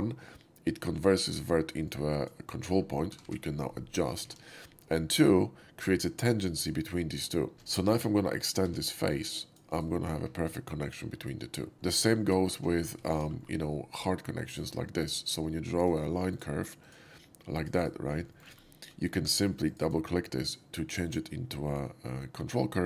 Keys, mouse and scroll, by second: 1.8-2.2 drag, 2.7 middle click, 3.1 g, 3.3 g, 4.2 ctrl+z, 7.5 ctrl+z, 8.2 click, 8.6 e, 9.1 click, 9.7 right click, 10.0-11.7 middle drag, 12.0 shift+middle click, 12.3 alt+middle click, 12.6 alt+middle drag, 12.9 shift+middle click, 13.4 shift+middle click, 14.5 shift+click, 15.8 shift+click, 16.3 click, 16.8 click, 17.4 click, 17.7 right click, 18.0 middle drag, 18.1 middle click, 18.3 right click, 18.3 s, 19.1 1, 19.6 click.